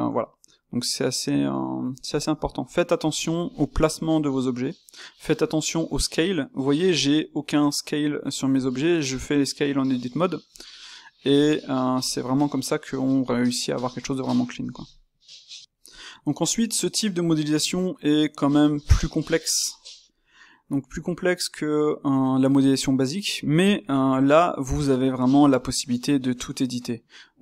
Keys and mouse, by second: 3.3-6.0 ctrl+shift+middle drag, 6.0 click, 8.4-10.5 drag, 11.3 click, 12.0 click, 12.9-23.6 middle drag, 23.6 click, 23.8-26.4 middle drag, 26.4 space.